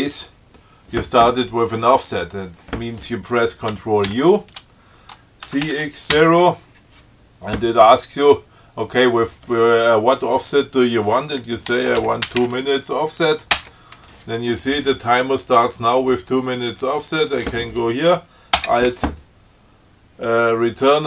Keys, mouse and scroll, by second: 4.4 ctrl+u, 5.7 ctrl+c, 6.0 ctrl+x, 6.4 ctrl+0, 11.8-13.0 typing, 13.9 Return, 17.5 click, 18.9 alt+Return.